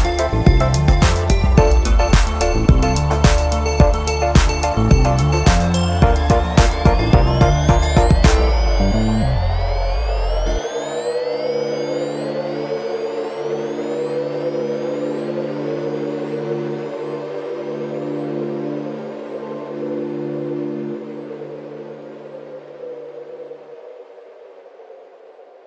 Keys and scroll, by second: 14.5 Tab, 17.2 ctrl+1, 19.5 alt+z, 20.8 alt+z, 24.3 Tab, 25.2 ctrl+s.